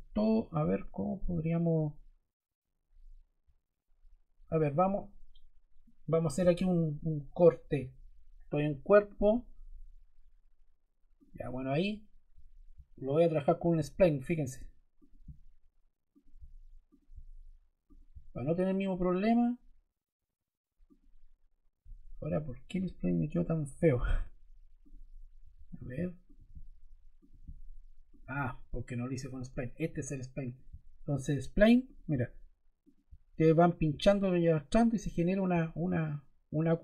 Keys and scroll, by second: 24.0 Escape, 25.3 BackSpace.